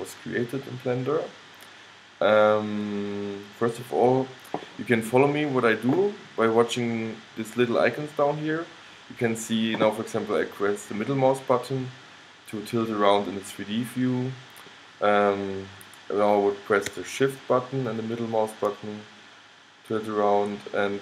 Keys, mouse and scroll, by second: 11.1-13.0 middle drag, 17.9-19.8 middle drag.